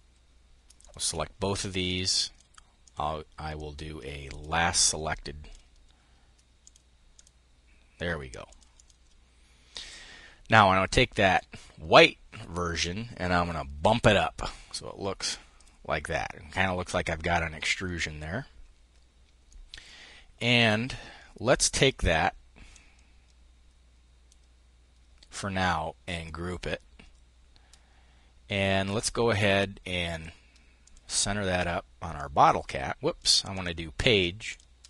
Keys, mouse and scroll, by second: 0.3 shift+click, 1.4-2.7 drag, 3.1-5.4 drag, 6.1 click, 7.9 click, 9.2 click, 10.7 click, 13.3 Up, 15.0 click, 18.9 click, 22.2-24.0 drag, 25.6 click, 29.6 click, 30.4-33.1 drag, 34.0-34.8 drag.